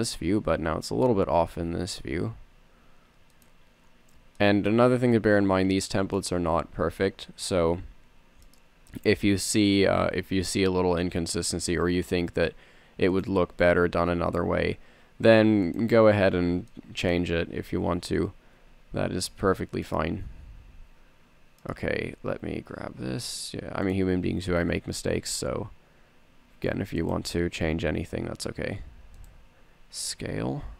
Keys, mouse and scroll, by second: 2.0 s, 8.1 e, 9.7 g, 14.1 s, 19.6 r, 21.2 e, 22.7 g, 24.7 s, 28.5 g, 30.0 s.